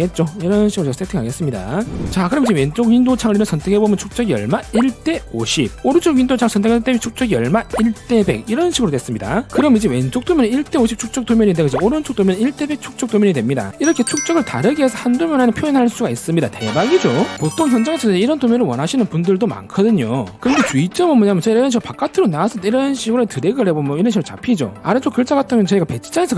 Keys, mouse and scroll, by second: 0.5 middle click, 0.9 middle click, 4.0 click, 7.3 click, 23.3 click, 24.2 click.